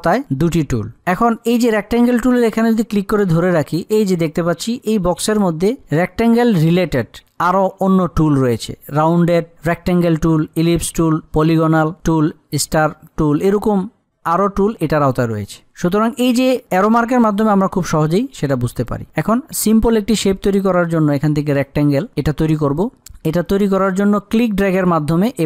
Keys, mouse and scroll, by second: 21.7 click, 24.9-25.4 drag.